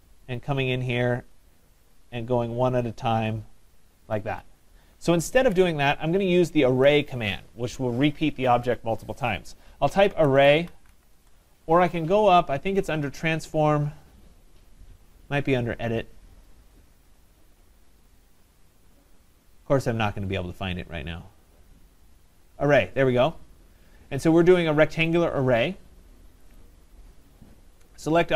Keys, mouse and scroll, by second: 0.0-0.6 typing, 0.1 middle click, 0.2 middle click, 0.3 middle click, 0.6 middle click, 0.7 middle click, 2.0 click, 5.5 Escape, 6.8 Escape, 9.8-11.4 typing, 13.1 click, 26.6 click, 27.9-28.3 scroll.